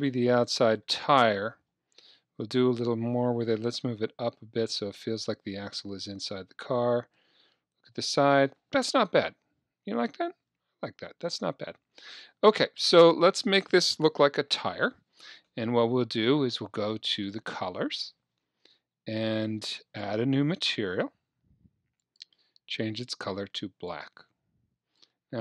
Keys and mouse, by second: 2.1 KP_1, 4.6-6.6 drag, 7.2 KP_3, 9.2 KP_1, 10.4 KP_1, 11.0 KP_3, 17.1-19.0 drag, 19.8-21.6 drag, 22.0-23.9 drag.